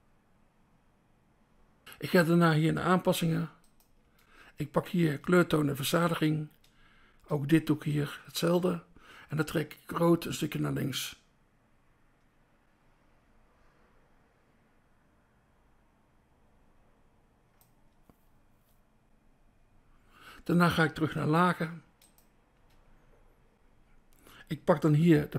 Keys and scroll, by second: 3.3 BackSpace, 4.0 BackSpace, 6.4 BackSpace, 8.5 BackSpace, 21.8 BackSpace, 22.4 BackSpace, 24.9 BackSpace.